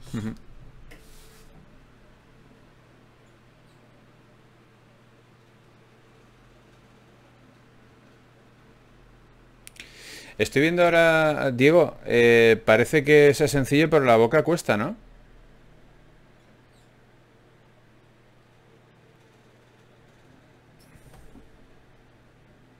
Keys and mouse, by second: 1.9 g, 5.3 k, 9.3 right click, 10.2 g, 12.5-15.4 right drag, 12.9 g, 13.9 g, 22.6-22.7 right drag.